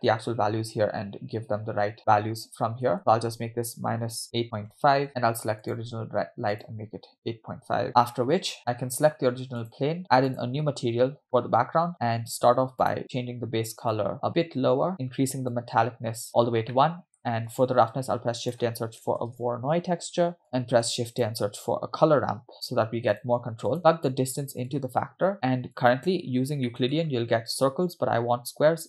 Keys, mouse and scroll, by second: 3.0-5.1 drag, 5.7 click, 6.5-7.9 drag, 9.6 click, 10.3 click, 11.2 scroll down 2, 12.4-12.8 scroll down 2, 12.8 click, 15.5 click, 16.7 middle click, 17.6 shift+a, 20.4 click, 20.7 shift+a, 23.8 click, 24.8-25.4 drag, 25.8-26.2 drag, 26.3 scroll up 2, 26.7 middle click, 27.0-27.5 scroll up 2, 27.6-28.8 drag.